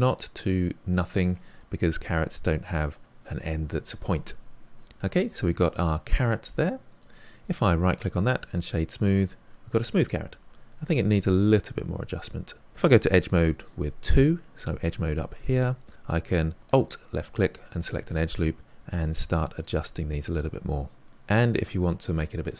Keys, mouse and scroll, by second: 1.5-4.4 middle drag, 4.7 Tab, 4.9-5.4 scroll down 4, 5.4-7.2 middle drag, 7.2-7.9 scroll up 4, 7.9-9.2 right drag, 9.2 scroll down 1, 9.2-10.2 middle drag, 10.2 Tab, 12.6 ctrl+z, 14.1 2, 17.1 alt+click, 17.8 middle click, 18.7 g, 19.9-21.1 middle drag, 21.1-22.5 scroll up 3.